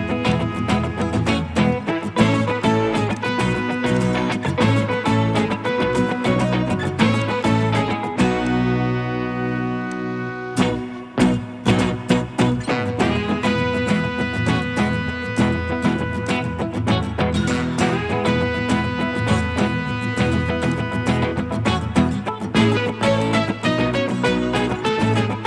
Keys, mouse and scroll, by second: 12.4 Escape, 17.6-18.9 typing, 20.3-20.7 scroll up 1.